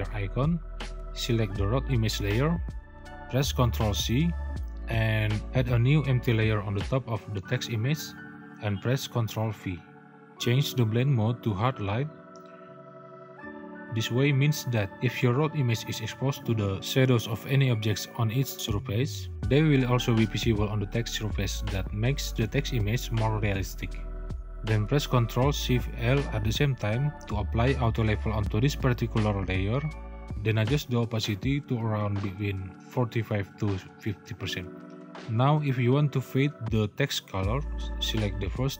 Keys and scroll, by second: 3.0 ctrl+c, 8.5 ctrl+v.